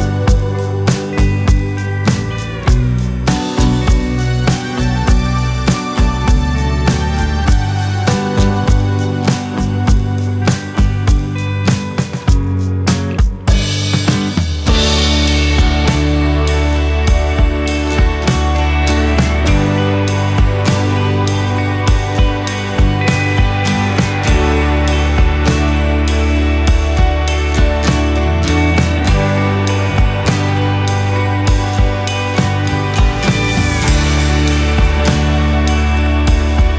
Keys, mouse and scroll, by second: 0.4-1.4 drag, 1.9 click, 2.7 KP_5, 3.4-5.7 drag, 5.7 KP_0, 6.3 BackSpace, 6.8 KP_0, 8.4 scroll down 2, 8.5-9.5 middle drag, 9.5-10.2 drag, 10.2 shift+a, 11.9 click, 12.4-12.9 scroll down 28, 13.4-14.4 drag, 14.9-15.5 scroll up 8, 15.5 click, 16.2-17.2 drag, 17.4-18.4 middle drag, 19.0-21.8 drag, 20.8 KP_0, 22.9-24.3 drag, 23.3 KP_0, 25.9-26.4 scroll down 13, 26.4 middle click, 27.4 ctrl+d, 28.1 ctrl+s, 30.5 click, 36.6 click.